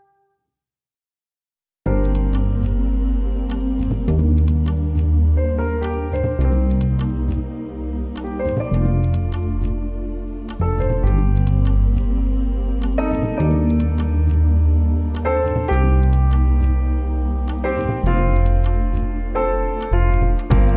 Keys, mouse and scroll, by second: 2.3 alt+scroll down 1, 2.8 click, 3.3 alt+scroll down 1, 4.0 alt+scroll up 1, 5.4-9.2 drag, 9.9-10.6 alt+scroll down 2, 10.6 alt+scroll down 1, 11.7-15.8 drag, 16.3-16.7 alt+scroll down 1, 17.6 click, 18.0 alt+scroll up 1, 19.2 alt+scroll up 1.